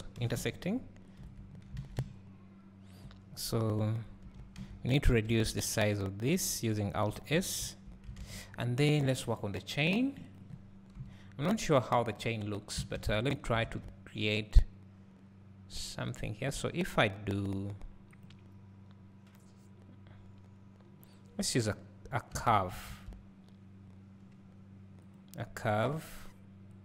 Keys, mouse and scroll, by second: 0.3 g, 1.3 Tab, 1.5 scroll down 1, 1.8 alt+a, 3.3 scroll up 1, 4.4 Tab, 4.6 a, 5.3 alt+s, 10.9 KP_7, 12.1 scroll up 1, 22.6 x.